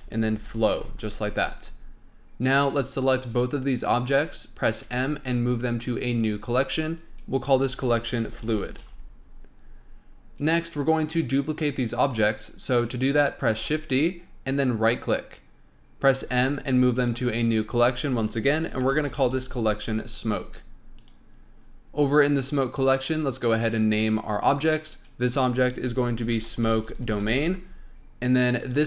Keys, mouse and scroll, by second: 3.0 shift+click, 4.8 m, 8.8 Return, 13.6 shift+d, 16.2 m, 24.3 click, 24.4-27.5 drag, 28.5 click, 28.7-28.8 drag.